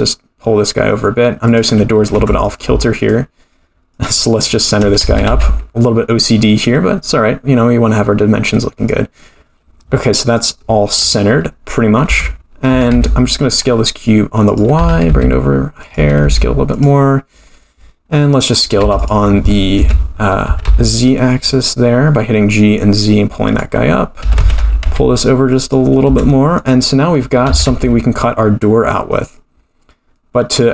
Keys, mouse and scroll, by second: 2.1 Tab, 2.4 click, 2.9 shift+click, 3.9 shift+click, 4.6 shift+click, 5.1 g, 10.3 click, 12.0 Tab, 12.7 s, 14.7 g, 15.9 s, 18.2 middle click, 18.8 3, 19.0 click, 19.8 KP_3, 20.5 g, 24.2 a, 24.4 s, 26.0 Tab, 26.3 middle click, 26.7-27.3 scroll down 4, 27.5 g.